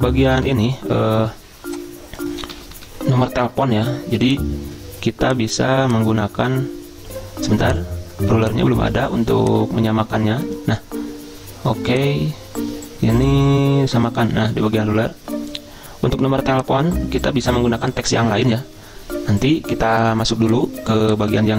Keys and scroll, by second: 0.4 Delete, 2.5 ctrl+[, 2.6 ctrl+[, 2.8 ctrl+[, 21.3 ctrl+a.